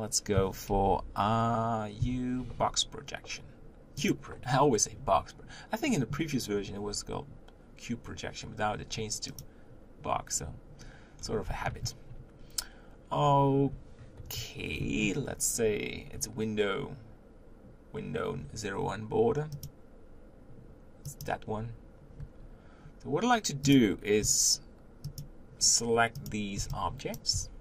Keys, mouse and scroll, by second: 0.7 ctrl+l, 4.1 u, 9.3 click, 11.1-14.2 scroll down 3, 14.2 KP_1, 19.8 click, 23.7 click, 25.2 shift+click, 27.1 b, 27.3 g.